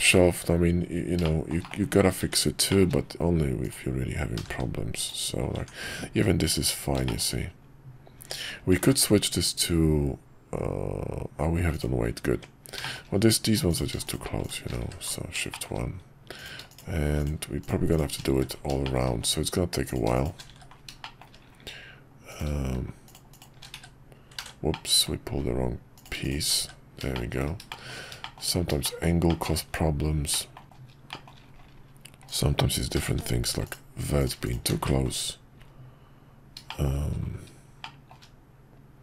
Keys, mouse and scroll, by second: 1.2 shift+middle drag, 2.7 shift+middle click, 4.3 g, 5.5 Tab, 7.0 shift+middle click, 8.1 Tab, 8.8 ctrl+`, 12.3 Tab, 12.8 shift+middle click, 14.8 shift+1, 15.5 shift+middle click, 16.4 click, 16.7 click, 17.2 click, 17.6 click, 17.9 shift+click, 18.4 shift+1, 18.8 middle click, 19.9 click, 20.1 shift+click, 20.6 shift+1, 21.0 middle click, 22.3 click, 23.0 shift+click, 23.8 shift+1, 24.4 ctrl+z, 24.7 middle click, 26.2 shift+click, 26.6 shift+1, 27.1 shift+middle click, 27.7 shift+middle click, 28.2 shift+middle click, 28.8 shift+middle click, 30.3 middle click, 30.6 shift+middle click, 30.7 scroll down 1, 31.1 shift+middle click, 32.3 click, 32.9 g, 34.2 click, 34.5 shift+click, 34.8 shift+1, 36.7 shift+middle click, 37.8 shift+middle click.